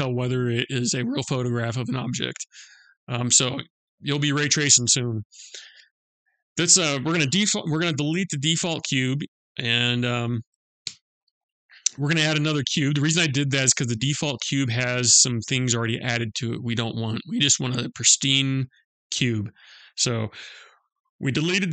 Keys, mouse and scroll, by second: 5.7 click, 10.4 Delete.